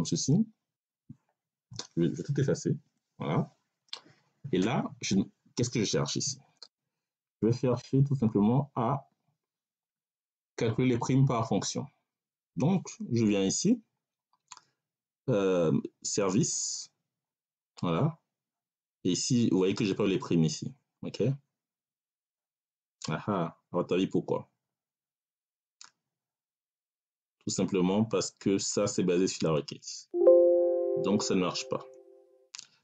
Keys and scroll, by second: 2.7 Delete.